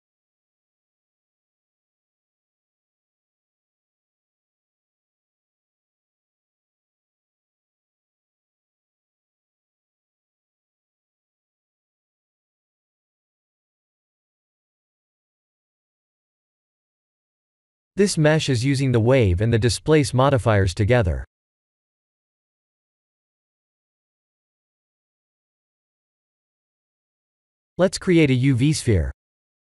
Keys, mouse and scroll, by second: 2.3 m, 4.9 Tab, 7.2 click, 8.5 click, 9.8 click, 13.3 click, 14.0 click, 15.2 click, 16.1 Tab, 16.4 click, 17.2 KP_1, 18.7 click, 20.6 click, 21.6 click, 22.7 click, 23.6-25.0 scroll down 3, 25.1 shift+a, 26.9 click, 27.7 click, 28.0 shift+a.